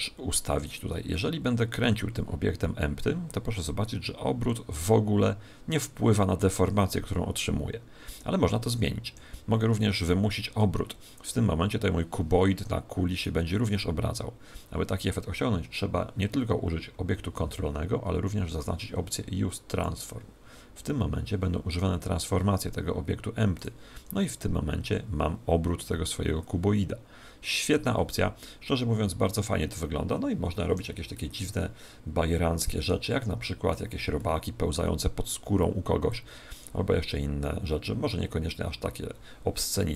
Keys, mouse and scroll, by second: 0.6 right click, 1.8 r, 13.1 right click, 19.6-21.4 drag, 23.5 right click, 31.1-33.0 middle drag, 33.1-35.8 middle drag, 36.0 click.